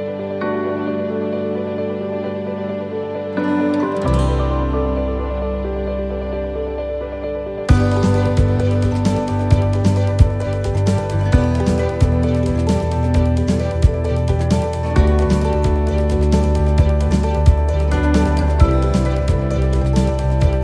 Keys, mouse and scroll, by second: 0.5 scroll up 4, 2.3 shift+middle click, 3.0-3.6 scroll down 5, 3.7 shift+middle click, 4.2-4.8 scroll up 2, 5.4 click, 10.1 shift+middle click, 10.5 scroll down 1, 11.1-11.5 scroll up 2, 12.4 middle click, 13.0 scroll down 2, 14.4 click, 18.4 shift+middle click, 18.4 scroll up 1, 18.9 shift+middle click, 19.3-20.0 scroll up 2, 19.8 middle click, 20.5 scroll down 2.